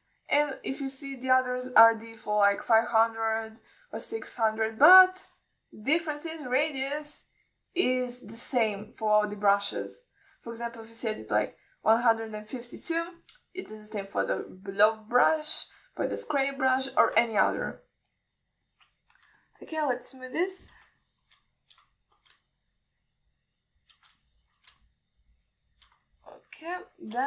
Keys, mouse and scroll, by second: 2.2 click, 2.9 click, 4.0 click, 4.7 click, 5.9 click, 7.4 f, 8.3 click, 9.2 click, 9.7 click, 10.3 click, 11.0 click, 12.1 f, 14.4 click, 17.3 drag, 18.4 click, 19.2 f, 20.6 ctrl+alt+middle drag, 21.2-22.0 shift+drag, 22.3 alt+middle drag, 22.7-23.0 alt+shift+middle drag, 23.2 alt+middle click, 23.7 shift+click, 24.6 shift+click, 25.5 alt+shift+middle drag, 26.1 shift+drag, 26.6-27.1 shift+drag.